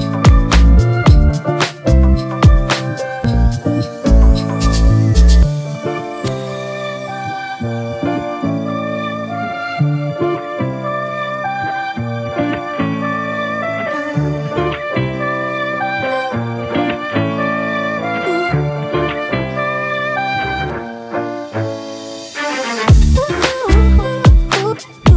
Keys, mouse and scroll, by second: 0.4-1.1 ], 3.3 typing, 11.2 typing, 16.4 alt+click, 23.5-24.9 typing.